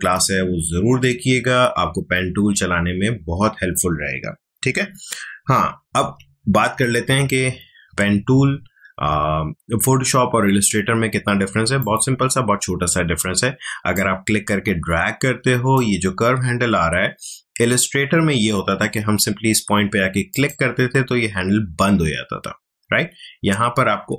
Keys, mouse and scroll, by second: 5.1 ctrl+alt+z, 11.8-18.1 drag, 20.3 click.